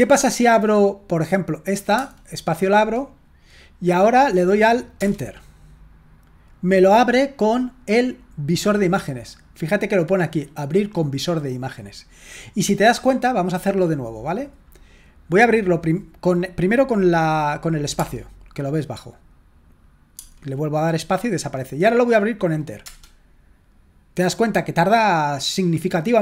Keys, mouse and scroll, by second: 1.4 click, 5.1 Return, 8.5 click, 12.3 click, 13.6 click, 14.3-15.2 drag, 23.0 Return.